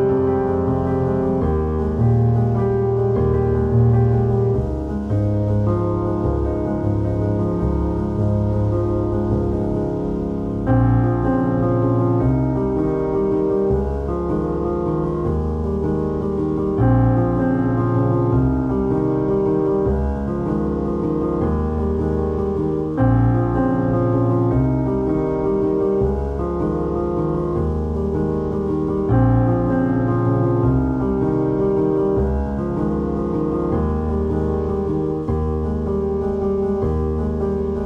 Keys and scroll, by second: 32.5 ctrl+z, 34.6 ctrl+d, 37.4 ctrl+i.